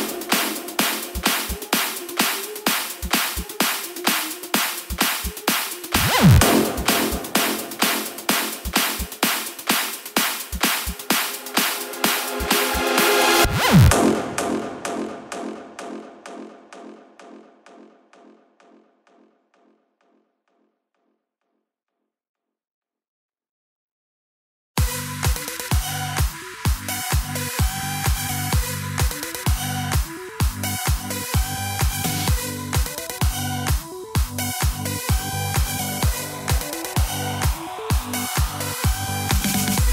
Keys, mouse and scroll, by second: 8.5 click, 9.2 click, 10.4-14.6 drag, 22.3-27.4 drag, 37.4-38.8 right drag, 38.8 space.